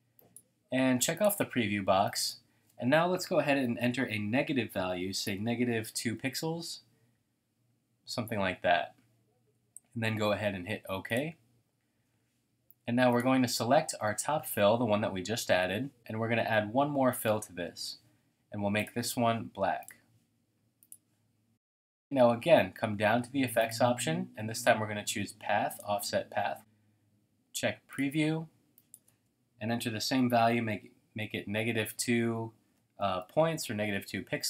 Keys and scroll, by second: 5.2-6.7 typing, 30.0-30.8 typing, 32.6-33.0 typing, 33.2 Tab.